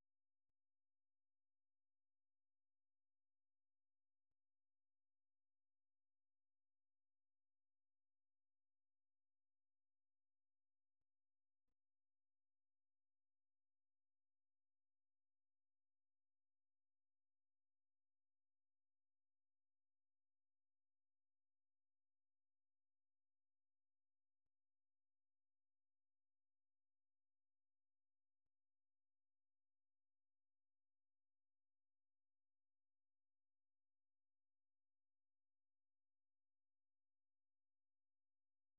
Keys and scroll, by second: 0.5 super+1, 1.8 super+2, 2.5 typing, 7.8 super+1, 9.5 super+2, 18.2 typing, 20.9 typing, 21.8 super+1, 22.9 super+2, 30.4-32.2 typing.